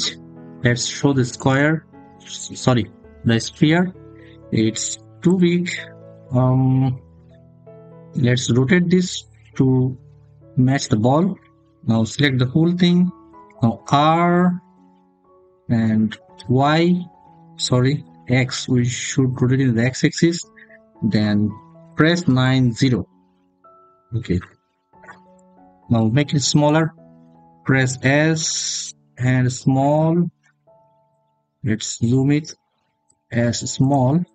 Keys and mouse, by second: 1.1 click, 13.2 r, 16.2 y, 17.9 x, 21.9 9, 22.2 0, 23.2 Return, 26.6 s, 29.7 click, 32.8 s, 33.6 click.